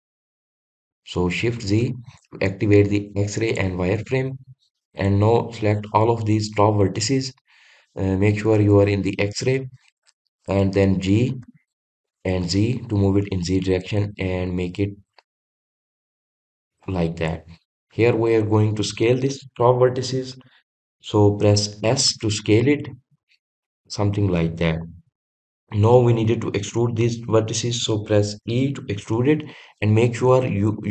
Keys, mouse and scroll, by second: 1.6 shift+z, 3.5 click, 5.0 click, 5.7 click.